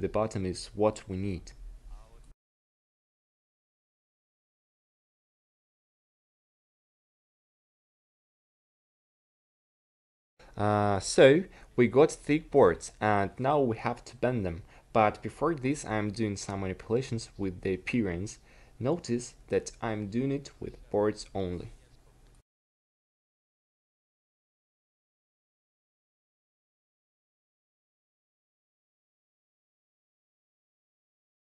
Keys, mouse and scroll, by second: 12.7 Tab, 13.4 a, 19.9 Tab, 22.7 Tab, 23.4 s, 24.3 s, 30.4 Tab.